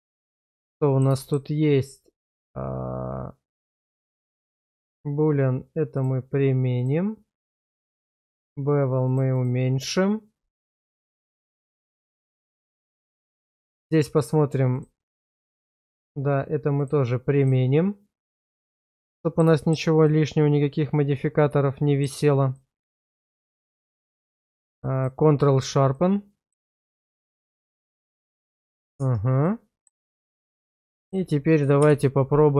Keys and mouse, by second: 0.6-1.0 middle drag, 1.2 shift+middle drag, 4.2 click, 4.7 click, 6.0-6.9 drag, 9.1 click, 9.3 click, 10.9-11.7 middle drag, 11.9 shift+middle drag, 12.2-13.0 middle drag, 14.2 click, 14.7 click, 15.2 click, 15.7 click, 16.9-17.5 drag, 18.8-19.4 middle drag, 19.6 shift+middle click, 20.1-22.0 middle drag, 22.5-23.6 middle drag, 24.1 q, 26.0-26.5 middle drag, 26.8 shift+middle click, 27.0 Tab, 27.7 shift+middle click, 28.6 middle click, 29.0 Tab, 29.4 middle click, 30.1 Tab, 30.7 alt+middle click, 31.8 /.